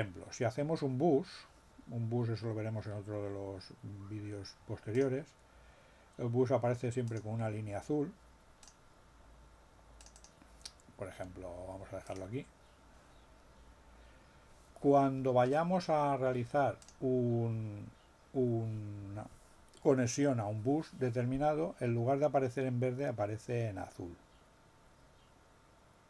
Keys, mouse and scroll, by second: 4.9 click, 7.1 click, 8.6 click, 9.9 click, 12.1 right click, 16.8 click.